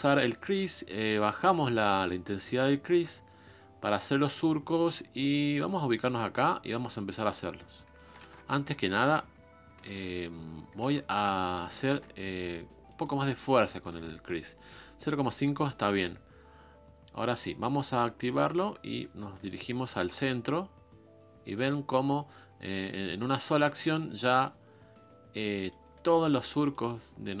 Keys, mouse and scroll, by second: 0.2 click, 0.6 f, 1.8 middle click, 2.2 f, 3.4-3.9 scroll up 2, 4.2 scroll down 1, 7.1-8.2 drag, 8.2 ctrl+z, 9.8 ctrl+z, 11.1 ctrl+shift+z, 11.9 shift+f, 13.9 shift+f, 15.4 shift+f, 17.5-19.5 drag, 19.5 middle click, 20.4-22.2 drag, 22.2-22.7 scroll up 3, 22.7-25.5 drag, 25.5 middle click, 25.9 scroll down 2, 26.0-27.4 drag, 26.0 middle click.